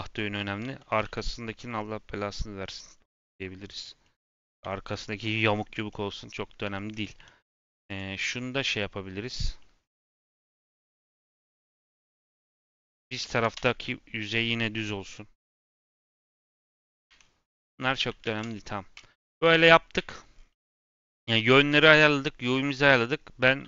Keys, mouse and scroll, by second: 0.5 g, 0.9 r, 4.9-5.8 scroll up 2, 5.8 middle click, 6.6 Tab, 6.8 click, 7.1 Tab, 7.8 click, 8.6 scroll down 1, 9.5 middle click, 9.7 scroll up 1, 10.1 middle click, 10.3 click, 11.2 click, 11.4 g, 12.6 r, 16.1 click, 17.0 Tab, 17.1-17.4 scroll down 5, 17.4-17.7 middle drag, 17.7 scroll up 2, 17.9 a, 19.4 Tab, 19.9 a, 20.3-20.6 scroll down 4, 20.6 middle click, 21.0 a, 21.9-22.7 scroll up 5, 22.7 click, 23.4 a.